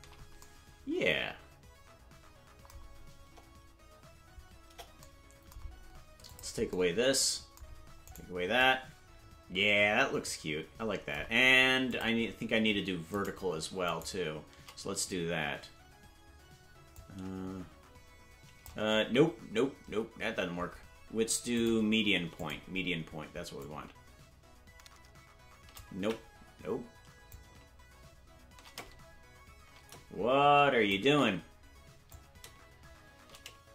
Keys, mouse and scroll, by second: 3.2 KP_0, 4.6 KP_0, 6.2 click, 8.0 right click, 11.8 click, 13.2 right click, 14.1 shift+right click, 16.9-18.6 drag, 19.5 ctrl+z, 21.5 click, 23.5-25.7 drag, 26.5 ctrl+z, 27.2-30.9 drag, 31.6 ctrl+z, 32.0-33.7 drag.